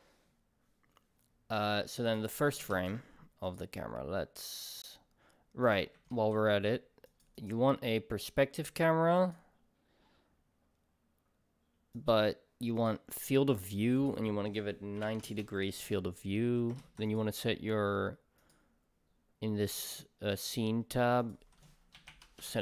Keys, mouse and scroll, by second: 2.1 click, 12.8-22.6 drag, 15.4 Return.